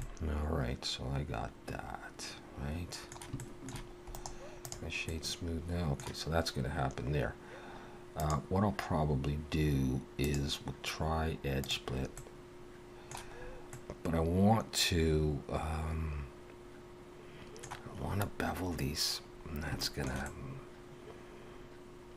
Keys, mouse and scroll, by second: 0.0 middle click, 3.4 shift+middle click, 4.1 right click, 5.1 middle click, 8.2 click, 10.2 click, 12.2 middle click, 13.4-13.7 scroll up 2, 13.7 middle click, 19.8 shift+middle click, 20.2 middle click.